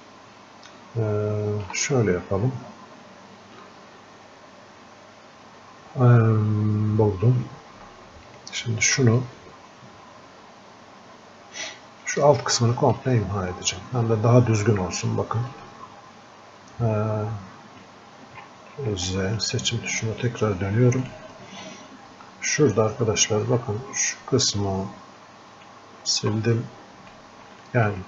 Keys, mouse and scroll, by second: 8.3 ctrl+shift+click, 9.5-15.6 drag, 15.6-19.0 ctrl+alt+drag, 19.0 ctrl+z, 20.0-26.6 ctrl+shift+drag, 26.6 click, 27.5 alt+click.